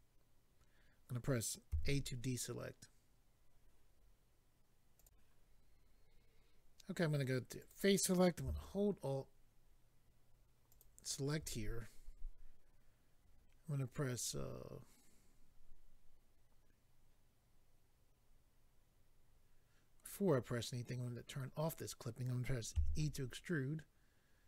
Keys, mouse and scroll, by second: 1.7 a, 4.9 click, 5.0 click, 7.6 click, 10.7 alt+click, 21.3 click, 22.7 e.